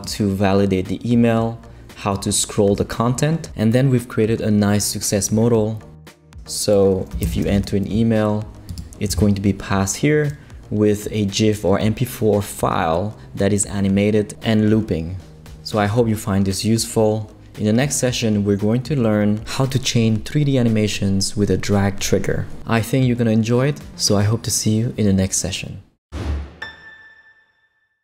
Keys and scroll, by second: 6.9-7.9 typing.